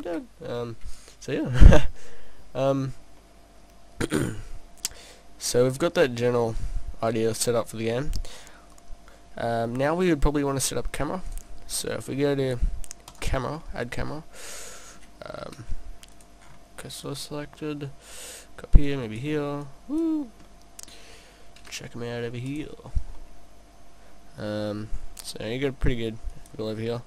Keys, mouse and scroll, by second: 2.7-3.2 scroll down 2, 3.2 middle click, 8.5 middle click, 11.3 click, 13.0 click, 13.6 middle click, 15.2 middle click, 15.7 shift+s, 16.5-17.1 scroll up 1, 17.1 click, 17.1 scroll up 1, 18.9 click, 19.7 click, 20.5 middle click, 21.6 shift+s, 22.9 scroll down 1, 23.2 middle click, 25.0-25.3 scroll up 4, 25.3 middle click, 26.3 click.